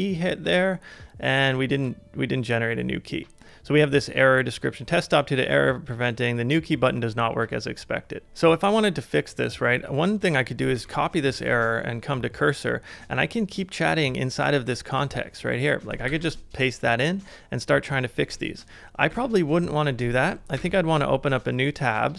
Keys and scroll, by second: 10.7 super+c, 10.9 super+c, 11.3 super+Tab, 16.1 super+v, 19.1 super+x, 20.6 super+n.